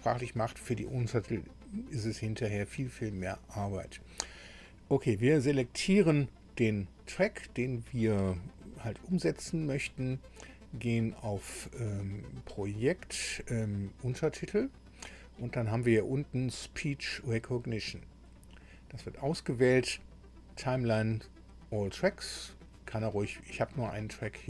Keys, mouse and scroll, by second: 5.6 click, 12.6 click, 18.2 click.